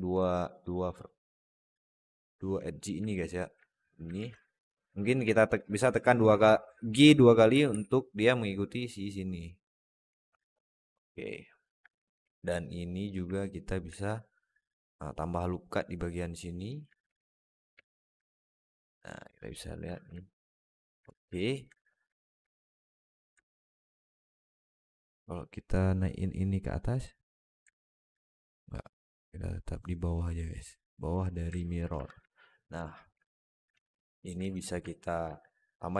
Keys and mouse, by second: 0.1 alt+middle click, 1.4 click, 2.6 click, 3.0 alt+middle click, 4.0 alt+z, 4.2 alt+shift+middle click, 4.5 alt+middle click, 5.2 alt+middle click, 7.4 g, 10.0 Tab, 10.3-11.6 alt+middle drag, 11.7 Tab, 12.1 alt+z, 12.2 alt+middle click, 13.7 ctrl+r, 16.9 alt+z, 17.6 alt+z, 18.1-19.6 middle drag, 19.7 Tab, 20.1 middle click, 20.9 Tab, 21.2 alt+middle click, 21.6 Tab, 22.0 alt+middle drag, 23.3-24.9 alt+middle drag, 26.5-27.0 drag, 27.6 alt+middle drag, 28.9-31.0 drag, 31.4 alt+middle click, 31.8 Tab, 32.2 alt+middle click, 32.7 alt+shift+middle click, 33.1 alt+middle click, 33.6 Tab, 33.9 alt+middle click, 34.3 Tab, 35.1 ctrl+r.